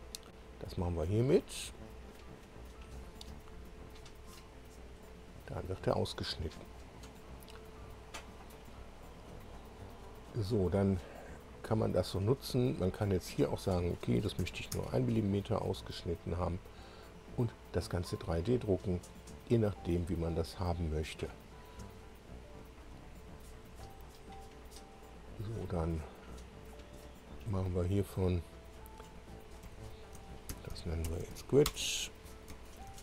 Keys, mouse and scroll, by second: 1.0 click, 4.9-9.8 drag, 11.1 click, 13.3 click, 14.4 1, 14.8 Tab, 15.8-20.2 drag, 22.8 click, 24.6 click, 27.7 click, 29.6 F2, 30.2-31.7 typing, 32.9 ctrl+e.